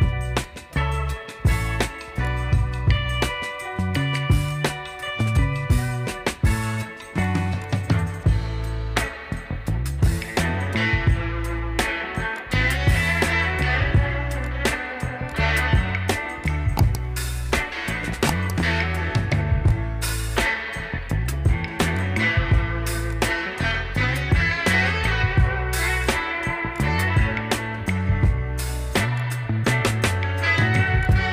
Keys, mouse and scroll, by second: 4.4-7.0 drag, 9.7 ctrl+0, 12.1 click, 19.5 click, 25.8-31.3 drag.